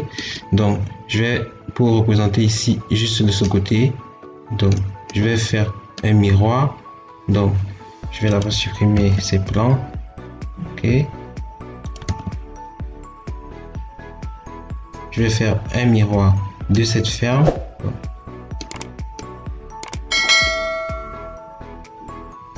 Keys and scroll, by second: 8.8 ctrl+x, 11.9 ctrl+x.